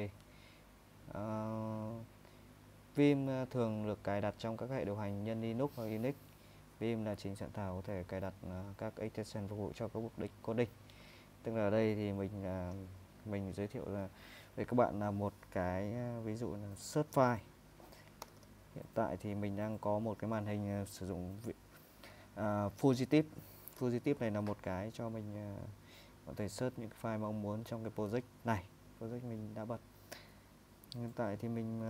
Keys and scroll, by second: 0.0 super+Tab, 10.7 super+Tab, 18.2 typing, 20.7 typing.